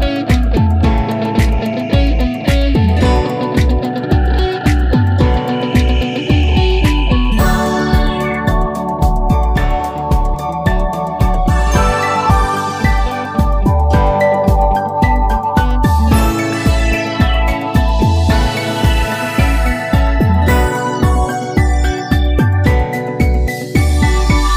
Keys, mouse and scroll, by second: 7.3 click, 10.0 click, 14.6 click, 19.1 click, 20.6 click.